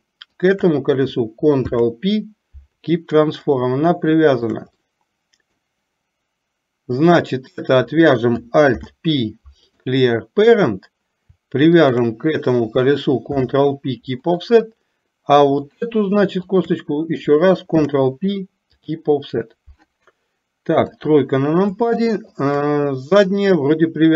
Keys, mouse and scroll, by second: 0.5 shift+click, 4.0 shift+middle click, 4.9 middle click, 7.3 click, 11.9 shift+click, 16.6 shift+click, 18.0 ctrl+p, 20.9 KP_3, 22.1 shift+middle click.